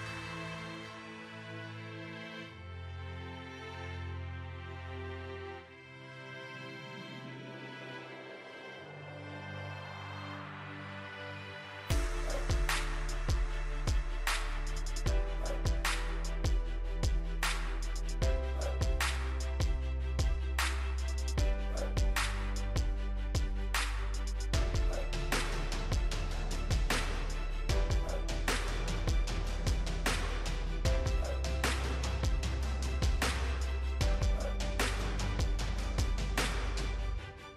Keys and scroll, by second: 18.5 alt+e.